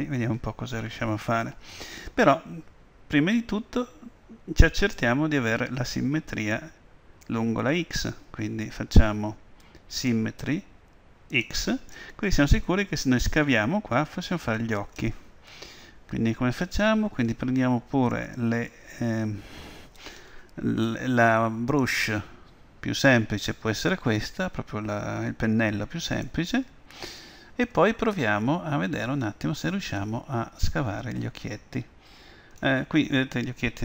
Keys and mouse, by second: 10.0-13.2 drag, 21.9-23.7 drag, 30.1-32.0 drag.